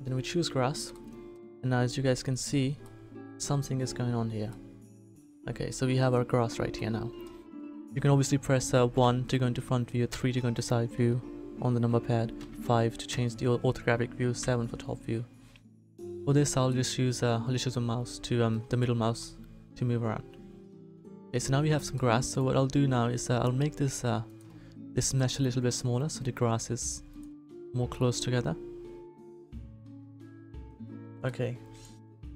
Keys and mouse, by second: 8.9 KP_1, 10.0 KP_3, 12.3 KP_5, 13.0 KP_5, 14.4 KP_7, 15.7 KP_1, 22.8 s, 26.5 s.